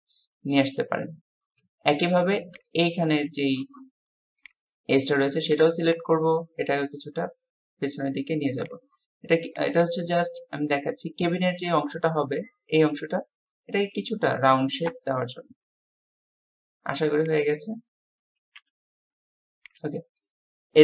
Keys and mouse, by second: 2.7-3.5 drag, 10.2 g, 11.9-13.0 drag, 13.9-14.3 drag, 14.9 KP_3, 18.3 g, 20.2 click.